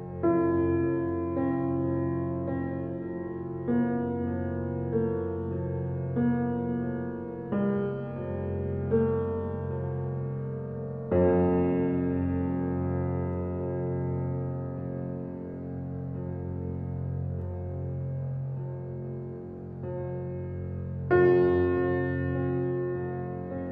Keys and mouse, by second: 0.0 Tab, 1.4 click, 2.9-4.0 shift+drag, 4.2 g, 4.5 x, 5.7 shift+click, 6.7 click, 7.6 g, 7.9 x, 9.4 shift+click, 10.2 typing, 14.5 ctrl+s, 16.2 click, 16.7 click, 17.2 click, 18.0-19.7 drag, 21.1-21.9 drag.